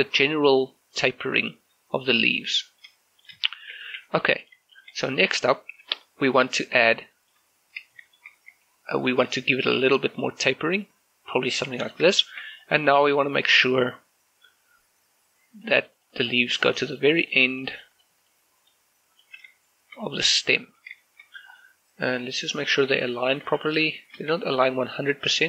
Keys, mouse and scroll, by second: 0.2 shift+middle click, 0.5 s, 2.6 shift+middle click, 3.2 scroll up 1, 3.5 shift+middle click, 4.8 shift+middle click, 6.1 shift+middle click, 7.2 shift+middle click, 8.0 shift+middle click, 9.3 s, 11.9 click, 12.2 shift+middle click, 12.6 right click, 17.0 click, 19.7 shift+middle click, 20.1-20.4 scroll up 1, 20.4 middle click, 21.3-21.7 scroll up 1, 21.7-23.1 middle drag, 23.1 shift+middle click, 24.3-25.4 scroll up 1.